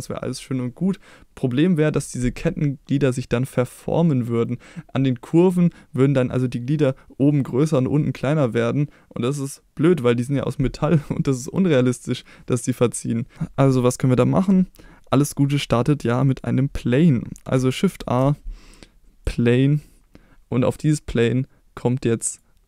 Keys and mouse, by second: 4.3-4.6 middle drag, 11.1-11.4 middle drag, 18.0 shift+a, 22.4-22.6 drag.